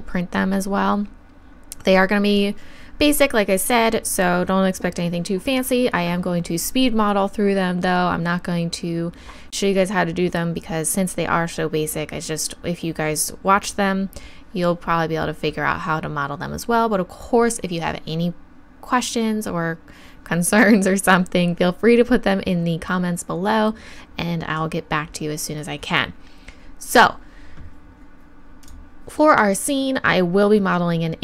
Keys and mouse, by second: 28.6-31.2 drag.